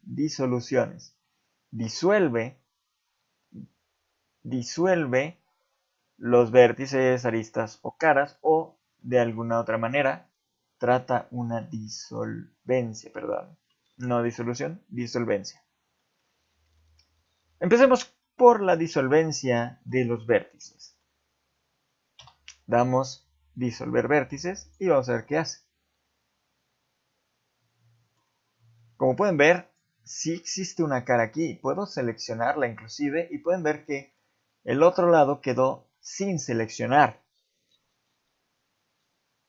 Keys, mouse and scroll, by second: 8.1 middle click, 8.4-9.0 scroll up 2, 9.0 middle click, 9.4 ctrl+Tab, 10.9 click, 11.2 middle click, 11.9 shift+middle click, 15.4 middle click, 16.0 shift+middle click, 16.8 middle click, 17.7 middle click, 18.2 shift+middle click, 18.9 middle click, 19.7 shift+middle click, 20.7 middle click, 22.2 x, 25.1 middle click, 28.9 ctrl+Tab, 30.0 click, 30.7 middle click, 31.8 z, 32.3 middle click, 33.7 shift+middle click, 34.0 middle click, 35.9 middle click.